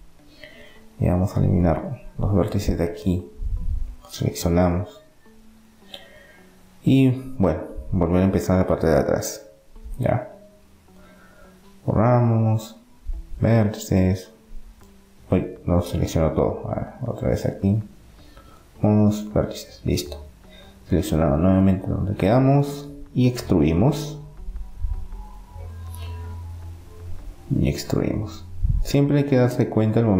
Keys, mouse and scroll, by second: 3.0-5.5 right drag, 5.5-7.0 middle drag, 7.3-9.4 right drag, 9.5 b, 12.3 Delete, 16.3 b, 18.3 Delete, 20.5-23.0 drag, 25.0 KP_7, 25.5-27.5 middle drag, 27.5 e, 29.0-30.1 drag.